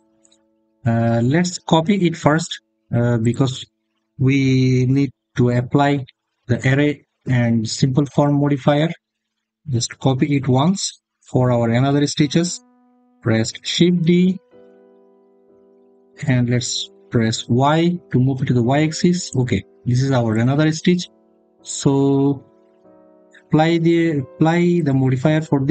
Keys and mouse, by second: 0.4 middle click, 3.0 click, 15.2 shift+d, 17.3 y, 19.1 click, 20.1 click, 21.9 click, 24.7-25.7 drag.